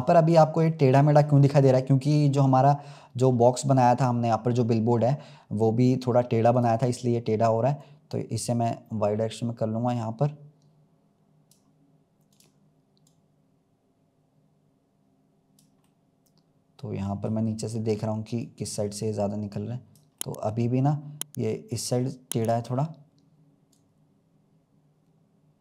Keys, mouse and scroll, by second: 0.6-1.2 middle drag, 1.2-1.6 scroll down 1, 1.6-2.8 scroll up 3, 6.4-8.1 drag, 12.2 click, 15.8-17.4 middle drag, 17.4-18.3 scroll down 2, 18.3 click, 20.1-22.4 middle drag, 22.4 click, 22.8-23.2 scroll up 1, 23.6 click.